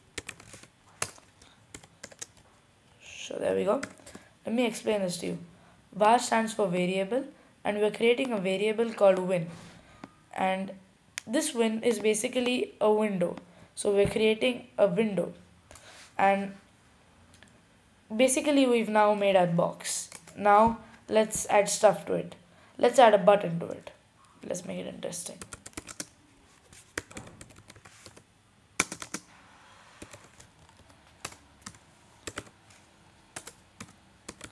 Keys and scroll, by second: 0.0-1.1 typing, 2.7-3.5 typing, 4.8-5.5 typing, 25.4 typing, 26.7-27.7 typing, 28.7-29.7 typing, 30.7-31.5 typing, 32.8-33.5 typing.